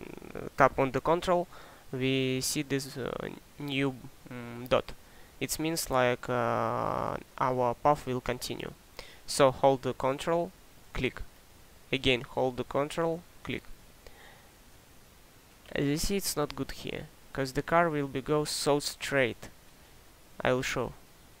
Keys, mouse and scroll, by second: 17.5 click, 17.8-19.7 ctrl+right drag, 19.7 click.